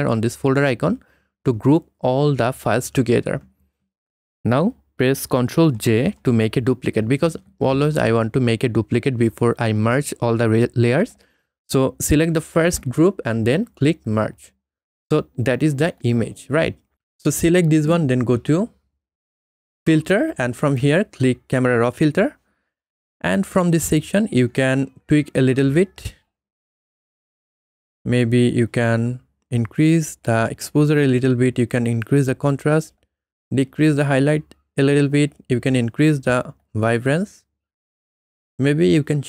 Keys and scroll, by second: 5.7 ctrl+j.